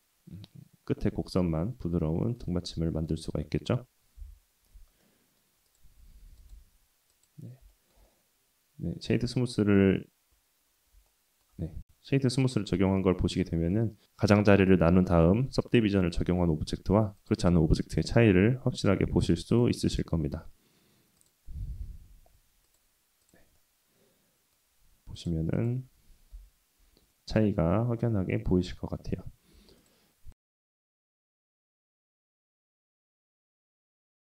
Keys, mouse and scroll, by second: 3.4-3.7 shift+middle drag, 3.7-4.2 shift+scroll up 1, 4.2 /, 5.0-5.4 middle drag, 5.7 click, 6.4-7.2 drag, 6.4 right click, 7.7 shift+middle drag, 8.1-8.9 middle drag, 9.1 click, 11.1 Tab, 15.5 Tab, 17.2 click, 19.5 click, 19.9-21.3 drag, 22.6 click, 23.2 click, 23.5-24.5 middle drag, 25.1 click, 25.5 shift+click, 26.3 /, 27.1-27.5 middle drag, 27.7-28.1 scroll up 1, 28.1-28.5 middle drag, 28.7 Tab, 29.6 Tab, 29.8 click, 30.3 click, 30.5 Tab, 30.7 Tab, 30.7 click, 30.9 Tab, 31.2 ctrl+r, 31.9 ctrl+r, 32.5 middle click, 32.9 ctrl+r, 33.9 ctrl+r.